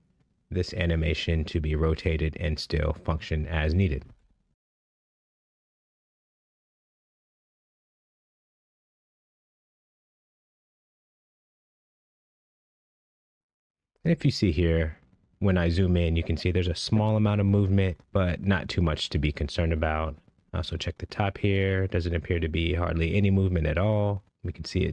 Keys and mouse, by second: 1.8-4.5 middle drag, 5.3-5.7 middle drag, 7.6 space, 9.1 ctrl+Tab, 11.8 click, 12.4 click, 13.8-14.2 middle drag, 15.6-16.2 middle drag, 17.3-17.9 middle drag, 18.1 shift+middle drag, 18.8 shift+middle drag, 20.6 shift+middle drag, 23.4 shift+middle drag, 24.4-24.9 middle drag.